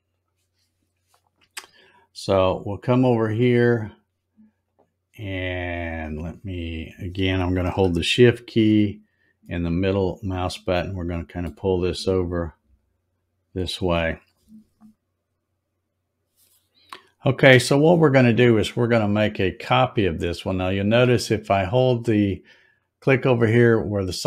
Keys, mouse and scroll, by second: 0.2 click, 2.3 click, 3.4 scroll up 3, 4.7 click, 9.4-11.5 shift+middle drag, 11.9 scroll up 1, 12.3-13.5 scroll down 6, 22.6 click.